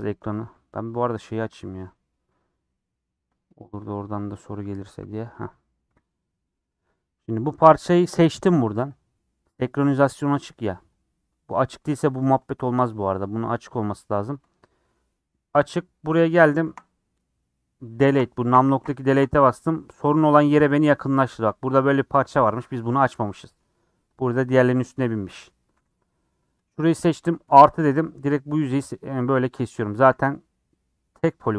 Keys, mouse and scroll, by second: 0.0 click, 1.4-5.4 drag, 5.4-8.7 middle drag, 8.7 3, 8.8-11.1 drag, 12.4 click, 14.1 click, 14.6-16.6 middle drag, 16.6 KP_Decimal, 17.1-17.6 scroll down 4, 18.1 KP_Decimal, 18.4 KP_Decimal, 19.4-21.3 middle drag, 21.3 scroll up 3, 21.7 scroll down 1, 21.8 middle click, 22.6 scroll up 3, 22.9-24.1 middle drag, 24.1 click, 24.2 scroll up 4, 25.5 middle click, 26.0 middle click, 26.6 click, 27.4 KP_Add, 28.6 scroll down 4, 28.8 middle click, 29.4-29.8 scroll up 4, 29.8 scroll down 1, 30.0-31.5 drag.